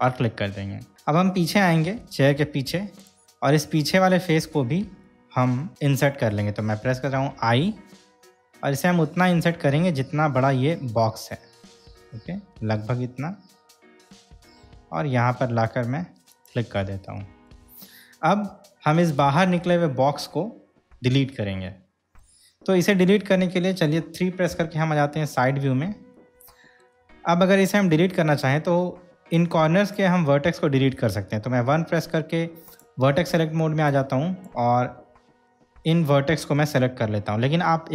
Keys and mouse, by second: 2.2-2.9 shift+middle drag, 3.2 click, 5.2-5.7 shift+middle drag, 16.5 shift+click, 17.7-19.3 middle drag, 21.9 middle click, 24.7 KP_3, 26.3-27.1 middle drag, 29.6 click, 31.9 1, 34.2-34.7 drag, 36.2 shift+click.